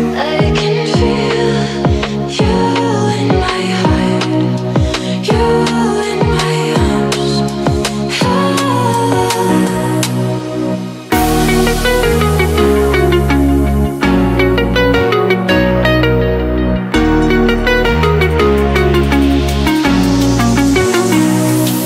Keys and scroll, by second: 8.5 Up, 9.7 Down, 15.0 space.